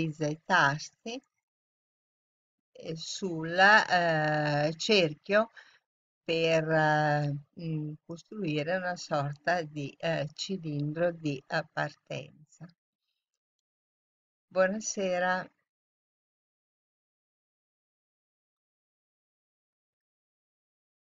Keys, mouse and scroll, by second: 0.7-1.1 z, 1.0-2.9 drag.